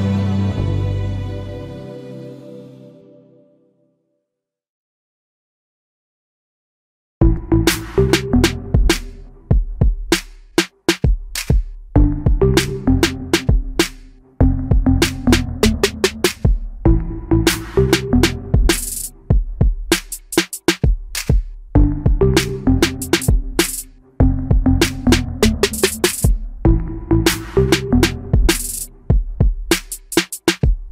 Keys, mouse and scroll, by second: 17.6 shift+middle click, 25.0 3.